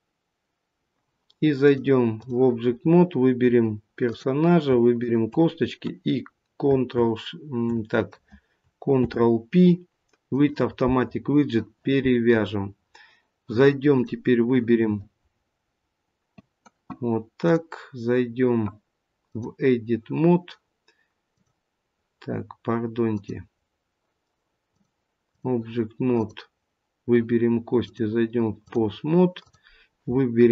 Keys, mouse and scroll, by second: 1.5 click, 2.6 scroll down 3, 3.5-4.2 scroll up 2, 4.0 click, 4.9 shift+click, 8.9 ctrl+p, 13.9 click, 17.4 click, 21.3 click, 23.0 click, 26.1 click, 27.8 click.